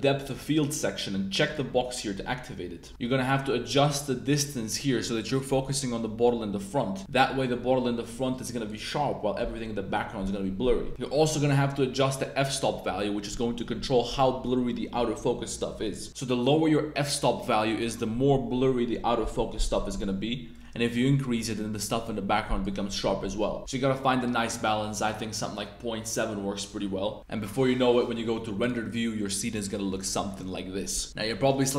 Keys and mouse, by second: 0.1 click, 1.4 click, 3.7-7.0 drag, 8.1 click, 11.3-13.6 drag, 16.1-17.8 drag, 20.5-22.6 drag, 23.6-26.7 drag, 28.6 click.